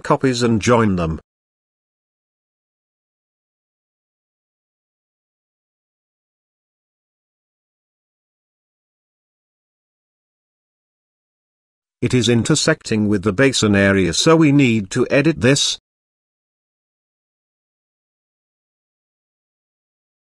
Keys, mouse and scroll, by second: 0.1 shift+click, 0.3 shift+click, 0.7 shift+click, 0.8 shift+click, 1.0 shift+click, 1.2 shift+click, 1.3 shift+click, 1.5 shift+click, 1.7 shift+click, 1.8 shift+click, 2.0 shift+click, 2.1 shift+click, 2.5 shift+click, 4.1 ctrl+j, 5.7 g, 7.3-8.7 drag, 9.3-10.2 middle drag, 10.8 shift+middle drag, 11.3 click, 12.3 click, 12.9 click, 14.2 Tab, 16.3 ctrl+r, 17.2 middle click, 18.2 g.